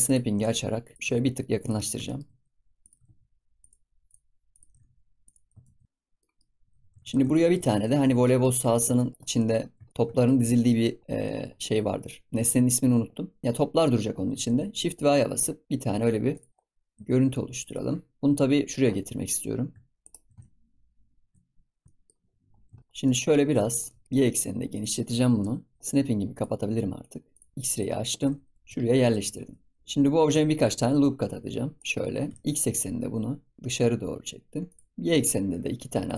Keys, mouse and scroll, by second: 0.0 click, 1.8 scroll down 1, 2.0 shift+middle drag, 2.3-2.7 scroll up 2, 2.7 click, 4.0 click, 4.4 click, 4.6 g, 5.8 click, 5.8 middle click, 6.3 scroll down 1, 6.3 middle click, 6.5-7.3 scroll up 5, 6.7 ctrl+s, 7.3-7.7 shift+middle drag, 7.7 ctrl+s, 8.0 scroll down 1, 8.2-8.5 middle drag, 8.5-8.9 scroll up 2, 8.9 shift+middle drag, 9.1 scroll down 10, 9.3 middle drag, 9.6 scroll up 6, 9.8 shift+middle drag, 10.1 shift+middle drag, 10.4 scroll down 1, 10.6 middle click, 10.9 scroll up 4, 11.2-13.4 shift+middle drag, 14.4 shift+a, 16.5-16.9 scroll down 10, 16.9 s, 18.2-19.9 scroll up 7, 19.9 shift+right click, 20.3 shift+s, 21.8-23.0 shift+scroll up 14, 21.8 middle click, 22.8 shift+middle click, 23.0-23.4 middle drag, 23.4 scroll up 2, 23.6 shift+middle click, 24.0 s, 25.8 KP_7, 26.3-27.0 drag, 27.2 click, 27.6-28.1 drag, 28.1 g, 29.3-29.8 shift+scroll up 2, 29.8 Tab, 30.8 ctrl+r, 32.2 s, 35.1 ctrl+r.